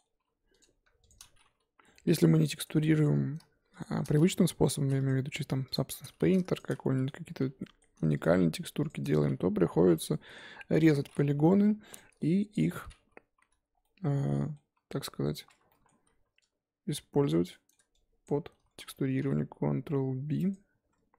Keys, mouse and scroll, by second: 0.2 j, 0.6 click, 1.1 shift+click, 1.7 j, 1.9-3.0 middle drag, 3.0 click, 3.8 shift+click, 4.2 middle click, 4.6 j, 5.1 click, 5.7 shift+click, 6.2 ctrl+z, 6.6 shift+click, 6.8 middle click, 7.4 j, 7.6 middle click, 8.2 click, 8.9 shift+click, 9.6 j, 9.9 click, 10.1 middle click, 10.8 shift+click, 11.5 j, 11.9 click, 12.6 shift+click, 13.4 j, 13.7 scroll down 2, 13.8 middle click, 14.7 Tab, 15.2 Tab, 15.5 2, 15.7 middle click, 15.9 z, 17.3 click, 17.5 middle click, 18.2 shift+click, 18.6 z, 18.7-19.1 scroll up 2, 19.1 ctrl+b.